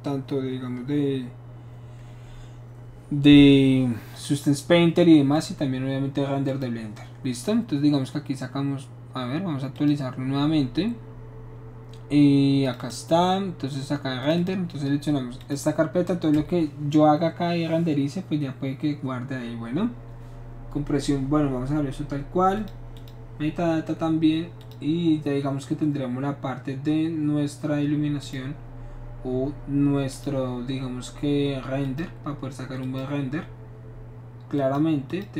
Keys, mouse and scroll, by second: 0.7 Return, 5.3 click, 6.5 click, 9.7 click, 12.6 click, 12.7 click, 14.2 click, 14.3 click, 15.4 click, 22.5 click, 22.9 click, 24.6 click, 28.2 click, 30.1 click, 31.8 click, 32.8 click, 34.5 click, 35.1 click.